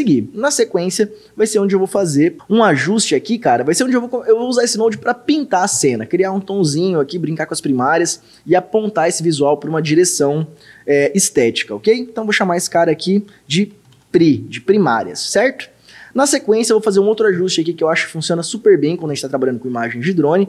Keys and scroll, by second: 13.5-14.4 typing.